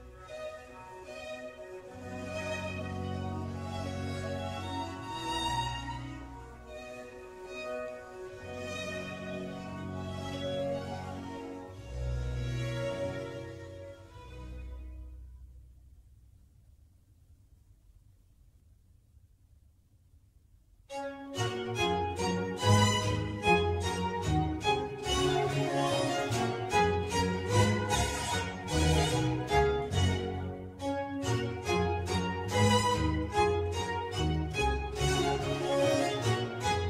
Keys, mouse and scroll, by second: 0.0 g, 0.9 scroll down 2, 1.4 click, 1.8 g, 2.5-3.0 scroll up 1, 3.0 click, 3.1 click, 3.9 Tab, 5.9 u, 6.6 Right, 6.8 Right, 7.7-15.5 typing, 17.1-25.9 typing, 27.2-34.6 typing, 31.2 Return.